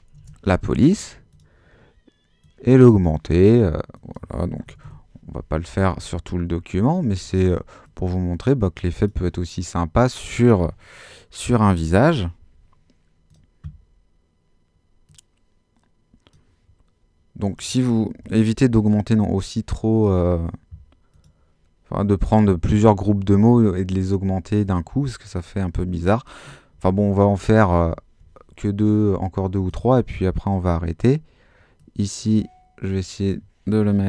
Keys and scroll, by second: 0.1 l, 4.4-5.3 typing, 11.6-12.4 typing, 17.9-18.7 typing, 26.7 super+-.